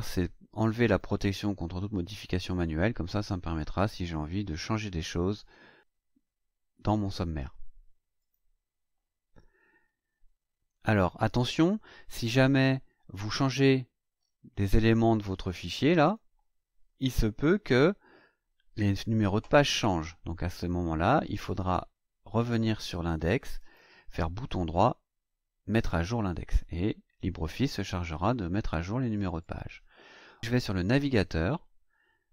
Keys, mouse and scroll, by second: 0.8 click, 8.2 click, 12.4-13.5 scroll down 6, 13.8-14.2 scroll down 4, 14.2-14.5 scroll up 2, 16.0 click, 17.2 Delete, 18.9 scroll up 2, 23.6 right click, 29.4 click, 30.8 click.